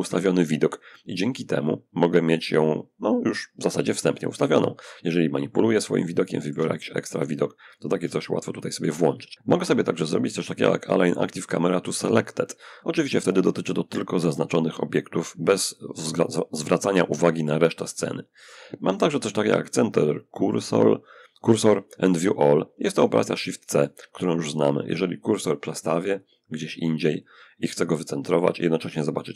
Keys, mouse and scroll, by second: 3.8-8.6 middle drag, 25.4-27.0 drag, 29.1 shift+c.